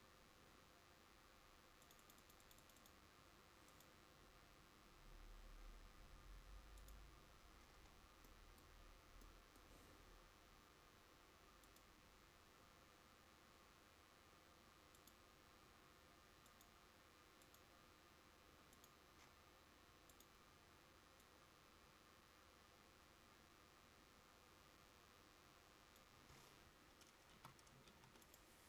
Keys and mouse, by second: 27.4 a, 27.9 ctrl+s.